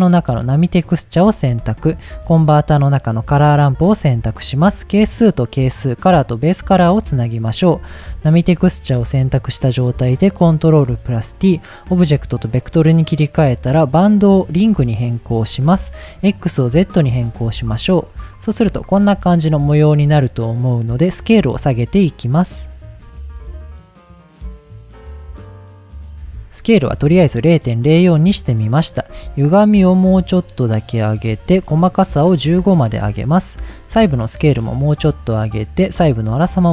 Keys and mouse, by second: 1.6 shift+a, 4.2-5.2 drag, 5.8-6.7 drag, 7.2 click, 8.3 ctrl+t, 8.7 middle click, 10.0-10.7 drag, 12.5 click, 14.1-14.9 drag, 15.9-16.9 drag, 18.1 middle click, 18.8-19.9 shift+middle drag, 21.1-22.9 drag, 27.0 middle click, 29.3-31.1 shift+drag, 31.6-32.9 shift+drag, 33.7-35.3 drag, 35.9-36.7 drag.